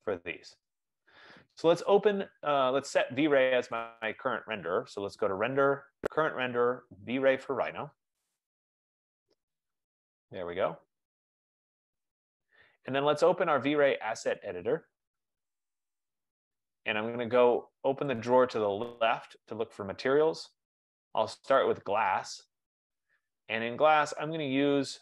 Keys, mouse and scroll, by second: 4.4 middle click, 4.6 click, 8.9 click, 14.6 click, 19.0 click, 22.0 click, 24.2-25.0 scroll.